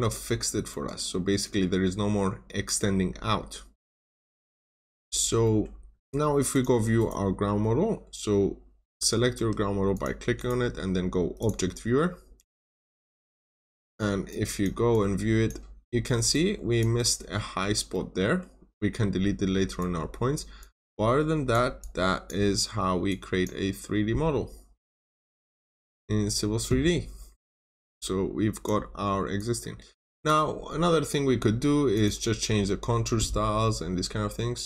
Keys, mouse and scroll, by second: 1.1 scroll down 1, 1.3 middle click, 1.7-2.2 scroll up 1, 2.6 scroll down 1, 3.0 scroll up 1, 4.3 scroll down 1, 4.6 middle click, 4.8 scroll down 1, 5.4 middle click, 6.4 middle click, 6.4 click, 6.9 right click, 8.9 Escape, 9.3 Escape, 9.8 click, 10.3 right click, 11.3 click, 15.7-16.2 scroll up 1, 16.3 click, 16.9 middle click, 17.4 scroll up 1, 17.8 middle click, 18.4-19.1 scroll down 1, 19.8 click, 22.4-22.8 scroll up 1, 23.0 click, 23.6 scroll down 1, 25.0 click, 26.8-27.1 scroll up 1, 27.7 click, 28.8-29.1 scroll down 1, 29.3 click.